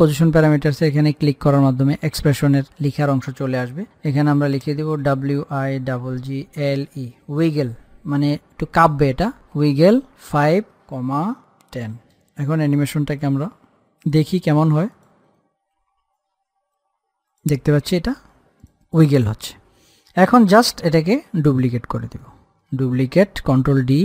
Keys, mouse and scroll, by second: 0.0 alt+click, 5.0-7.5 typing, 8.6 shift+9, 9.8 Left, 11.8 ,, 14.2 click, 17.6 click, 21.7 ctrl+d, 22.4 click, 23.2 ctrl+d, 23.8 click.